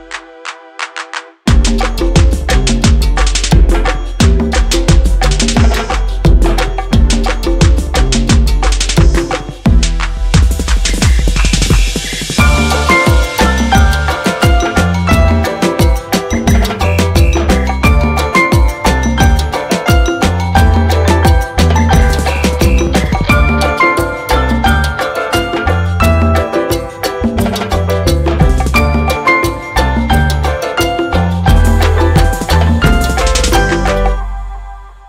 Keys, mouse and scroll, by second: 0.6-1.5 scroll up 1, 1.5-2.7 drag, 10.8 click, 10.8-11.9 drag, 29.8-33.9 drag.